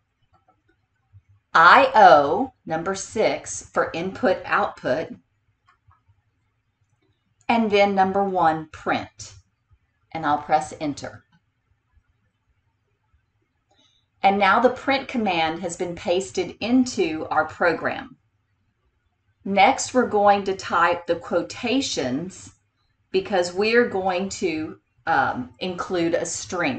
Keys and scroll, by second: 0.5 4, 5.8 6, 11.3 Return.